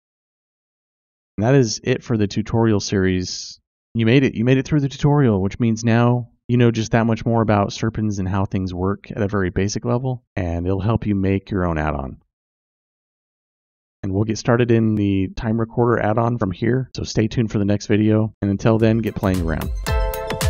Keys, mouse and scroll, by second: 0.9 click.